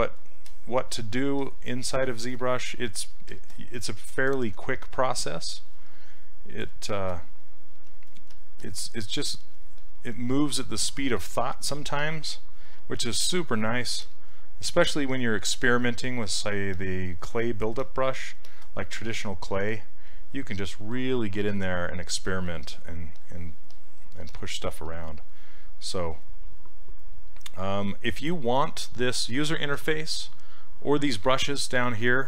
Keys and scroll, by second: 7.8 s, 12.8 s.